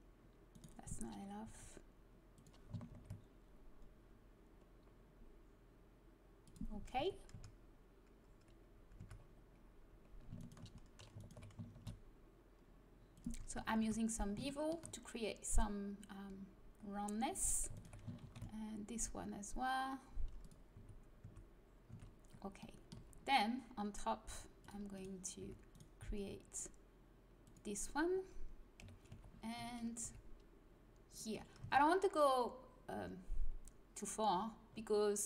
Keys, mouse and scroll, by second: 1.4 s, 2.9 ctrl+b, 6.9 a, 7.3 Tab, 8.9 Tab, 11.7 ctrl+b, 13.5 a, 13.8 Tab, 17.3 Tab, 18.2 ctrl+b, 20.7 a, 21.2 Tab, 21.9 Tab, 22.9 z, 24.6 middle click, 25.4 e, 26.0 s, 28.8 KP_1, 29.0 z, 30.0 e, 31.6 Tab.